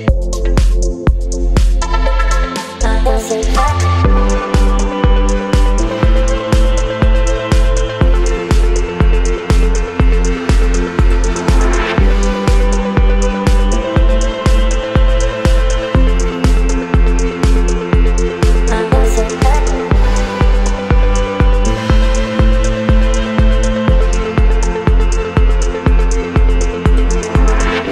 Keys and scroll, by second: 0.6 space, 8.5 v, 9.2 space, 23.4 Delete, 24.7 ctrl+d, 25.3 v, 26.1 space.